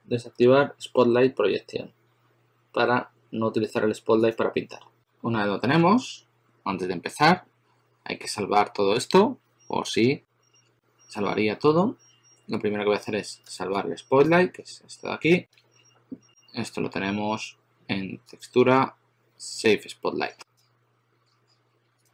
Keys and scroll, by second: 13.5 shift+super+a, 14.0 shift+super+a, 15.4 shift+super+x.